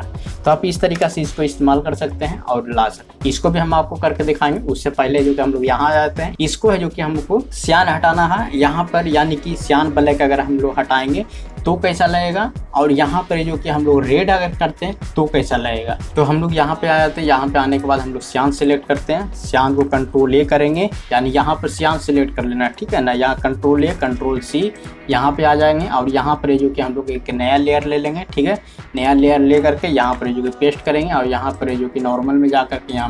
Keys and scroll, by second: 1.0 ctrl+0, 20.4-22.0 typing, 23.2 typing, 24.4 typing, 26.1 typing, 27.9 typing, 30.1 ctrl+v.